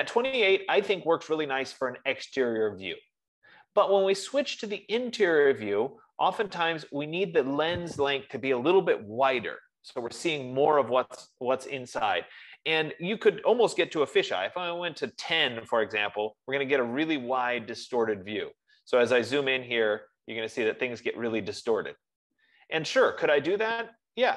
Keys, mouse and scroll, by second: 14.1 F15, 14.7 typing, 16.0 Tab, 19.5 scroll, 20.6-21.1 scroll, 22.4 scroll, 23.6-24.3 scroll.